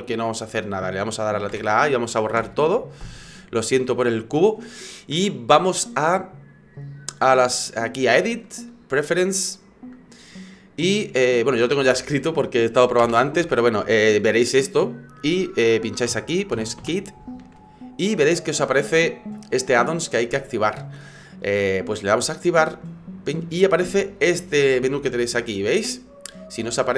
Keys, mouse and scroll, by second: 0.0 middle click, 1.5 a, 2.4 Delete, 8.4 click.